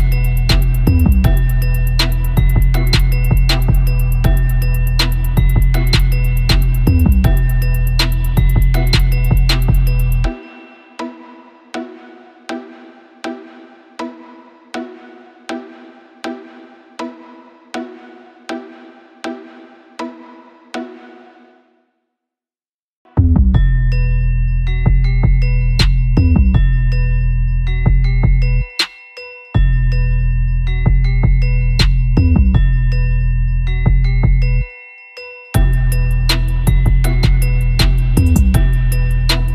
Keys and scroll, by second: 1.1 space, 1.3 space, 3.2 super+l, 6.0 Return, 6.2-7.1 typing, 8.1 super+t, 8.1 super+;, 10.2-11.2 typing, 11.6 super+t, 12.3 super+z, 13.4 Return, 15.3 super+;, 15.4 super+-, 15.5 super+=, 15.6 Tab, 15.7 super+=, 15.9 super+-, 15.9 Tab, 17.1 super+z, 31.5 super+=, 31.5 super+=, 31.7 typing, 37.2 super+z, 39.3 super+-, 39.4 super+-.